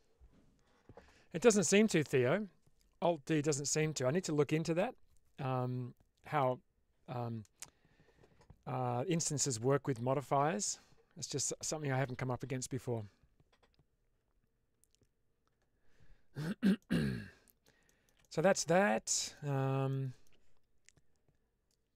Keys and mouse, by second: 16.7-17.5 middle drag, 17.9 shift+middle drag, 18.1-18.8 middle drag, 19.0 shift+middle drag, 19.8 middle click.